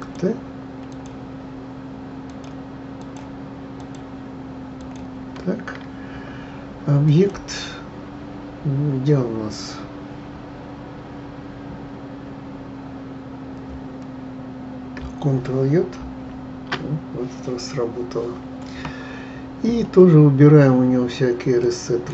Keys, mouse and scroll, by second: 0.0 shift+click, 0.9 shift+click, 2.2 shift+click, 3.0 shift+click, 3.8 shift+click, 4.8 shift+click, 7.0-10.0 drag, 16.0 ctrl+j, 21.6-22.1 drag.